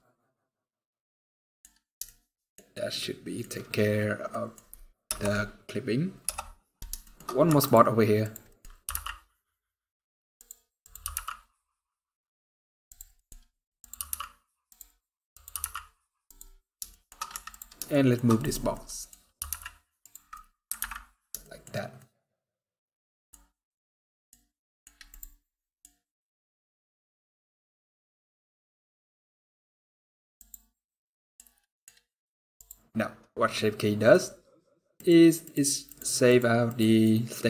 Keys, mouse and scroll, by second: 0.3-0.6 scroll down 1, 0.6 middle click, 1.4 scroll down 2, 1.8 shift+middle click, 3.0 shift+middle click, 3.2 shift+scroll up 2, 3.8 scroll down 1, 4.0 middle click, 4.8 KP_0, 6.0 KP_0, 6.7-7.0 shift+scroll up 6, 6.8 shift+middle click, 7.2 Tab, 7.9 click, 8.2 middle click, 8.4 scroll up 1, 8.7 g, 10.5 click, 10.8 g, 12.9 middle click, 13.0 scroll up 2, 13.5 click, 13.7 g, 15.0 click, 15.2 g, 16.3 scroll down 5, 16.6 shift+middle click, 16.9 scroll up 1, 17.0 Tab, 17.6 shift+middle click, 17.6 shift+scroll down 1, 18.9 scroll up 2, 19.1 g, 20.0 scroll down 2, 20.1 middle click, 20.6 alt+a, 20.8 scroll down 3, 21.1 shift+middle click, 21.8 shift+middle click, 23.3 middle click, 24.3 middle click, 28.8 middle click, 28.8-29.3 scroll down 4, 29.3 scroll up 4, 30.1 click, 30.8 middle click, 31.5 middle click, 31.7 scroll up 1, 32.3 click, 34.8-36.8 click, 37.3 click.